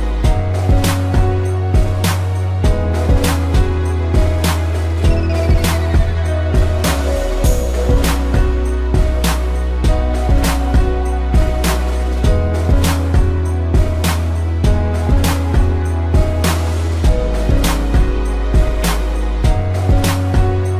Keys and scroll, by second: 5.6 space, 8.8 space, 11.2 space, 17.2 space, 18.3 space, 20.6 a.